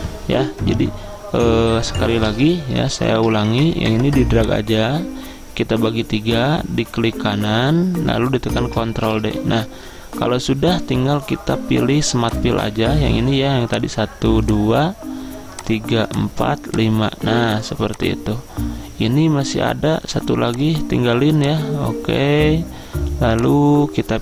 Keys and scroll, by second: 2.7 ctrl+z, 3.0 ctrl+z, 9.2 ctrl+d.